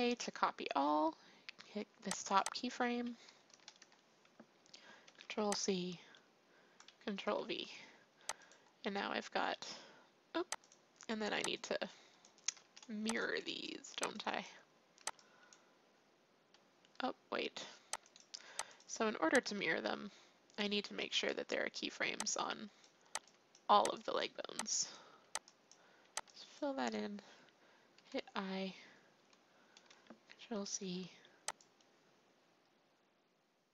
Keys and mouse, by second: 3.5 a, 3.8 a, 5.0 ctrl+c, 7.0 ctrl+v, 8.3-10.2 drag, 10.6-13.3 drag, 12.6 a, 13.0 b, 13.9 b, 14.9 b, 18.0 click, 18.4 x, 21.0 a, 22.0 b, 23.2-25.9 typing, 27.9 i, 30.6 ctrl+c, 31.5-33.5 drag.